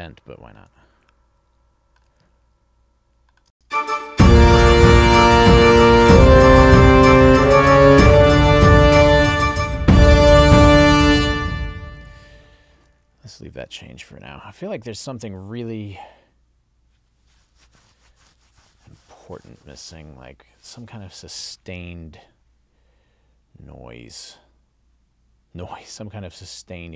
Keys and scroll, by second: 3.5 space, 11.3 space, 12.8 super+s.